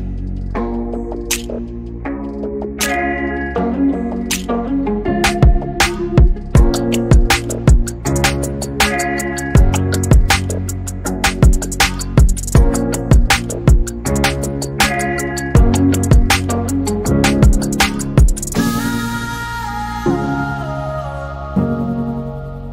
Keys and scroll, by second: 2.8 typing, 18.5-19.4 typing.